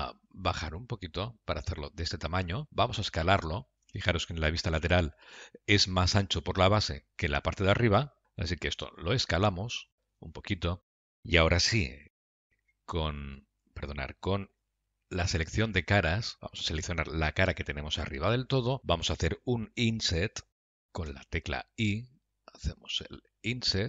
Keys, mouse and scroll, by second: 11.4 middle click, 12.9 F3, 15.3 3, 15.8 click, 16.4 click, 18.1 KP_Decimal, 18.8 scroll down 4, 18.9 middle click.